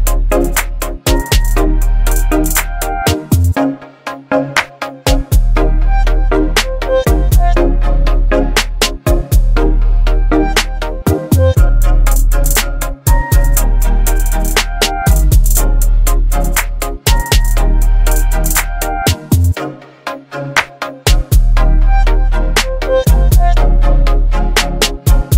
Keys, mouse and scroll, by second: 4.2 click, 12.0 v, 12.3 ctrl+t, 14.3-15.6 drag, 22.3 v, 22.9 ctrl+0, 25.2 click.